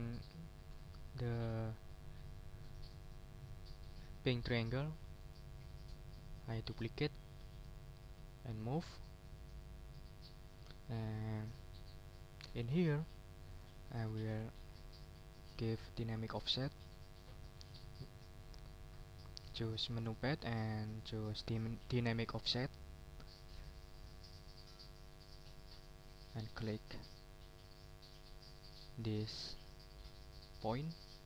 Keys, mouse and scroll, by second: 5.2 scroll up 1, 7.6 click, 8.3-9.8 ctrl+drag, 9.8 ctrl+click, 13.5 click, 22.7 click, 23.8 middle click, 24.5 ctrl+scroll up 2, 26.3-31.2 drag.